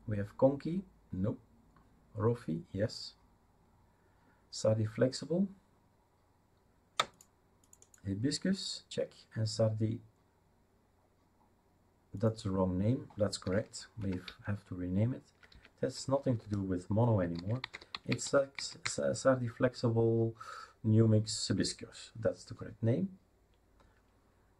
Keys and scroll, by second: 13.4 F2, 14.0 Right, 14.2 Left, 14.7 Left, 14.8-15.5 Left, 15.9-19.3 typing, 22.5 Return.